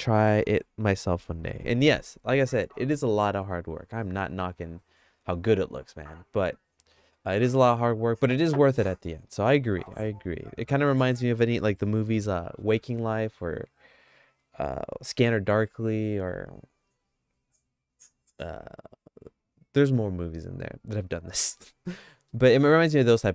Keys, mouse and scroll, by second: 9.7 middle click, 10.1 shift+middle click, 21.6 middle click, 22.3 middle click, 22.8-23.3 shift+middle drag.